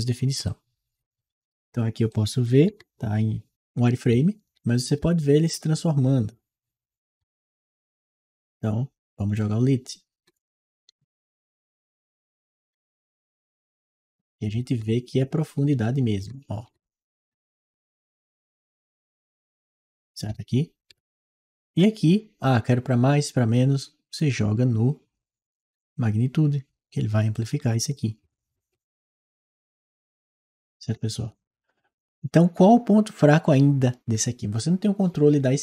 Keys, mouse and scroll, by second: 0.3 right click, 1.9-9.5 right drag, 2.5 w, 3.5 s, 4.8 w, 6.2 s, 7.1 w, 9.7-13.5 right drag, 10.7 s, 11.8 w, 13.5 click, 14.8-21.5 right drag, 14.9 s, 16.0 w, 17.5 s, 18.3 w, 20.7 a, 23.9 click, 27.1-29.0 right drag, 29.3 click, 30.3-32.1 right drag.